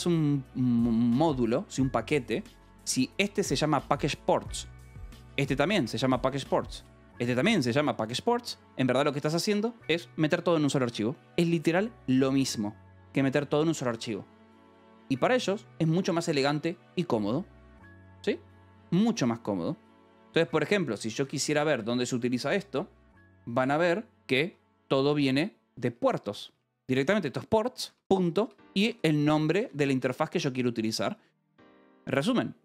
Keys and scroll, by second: 0.1 shift+v, 4.5 :, 4.8 j, 5.0 Return, 5.5 k, 6.6 shift+;, 6.9 j, 7.1 Return, 7.6 k, 16.9 :, 17.9 Return, 20.2-21.7 typing, 23.5 Return, 24.0-25.6 typing, 27.6-29.9 typing, 27.7 Escape.